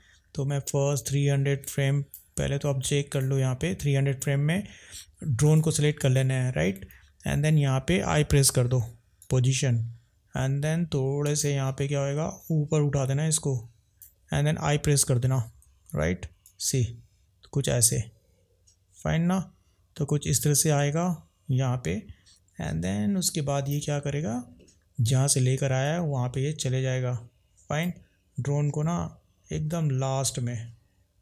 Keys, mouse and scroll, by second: 3.1 click, 5.4 click, 12.4 drag, 16.4 drag, 25.8 drag, 29.8 click.